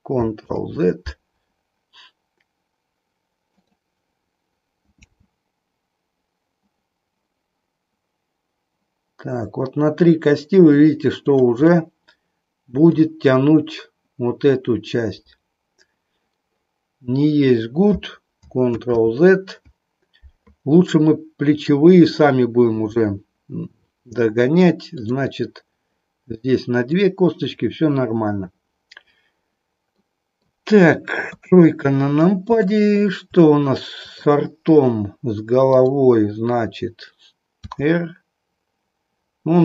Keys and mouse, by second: 0.4 ctrl+z, 3.5 click, 4.9 g, 11.8-13.0 middle drag, 18.6 ctrl+z, 26.9 click, 30.0 middle click, 31.3 KP_3, 32.8 middle click, 34.0 click, 35.6 click, 37.6 r.